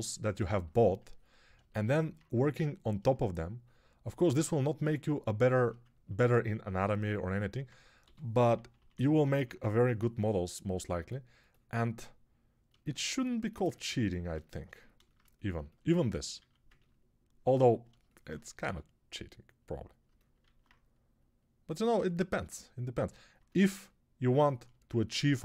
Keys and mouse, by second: 7.9-9.2 typing, 16.3 alt+q, 18.5 g, 20.3 alt+q.